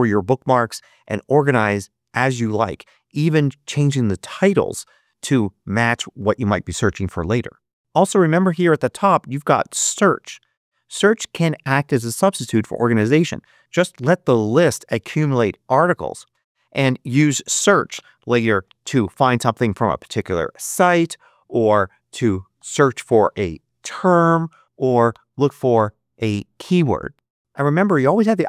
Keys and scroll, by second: 18.0-20.1 typing, 21.2-26.2 typing.